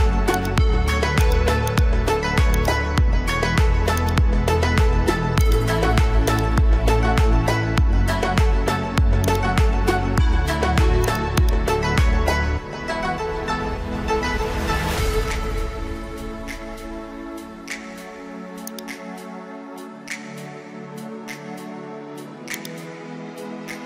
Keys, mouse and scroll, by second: 22.6-23.8 drag.